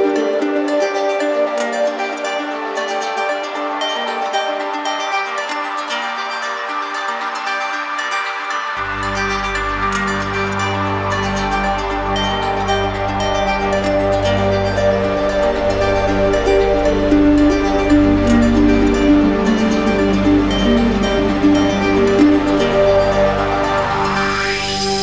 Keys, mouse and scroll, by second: 0.1 ctrl+click, 0.4 ctrl+click, 2.3 click, 2.9 ctrl+click, 5.2 click, 7.8 click, 9.2 click, 9.8 shift+click, 10.9 click, 12.8 click, 13.6 click, 14.1 shift+click, 14.1 shift+click, 17.0 click, 18.0 click, 22.3 click, 23.9 click.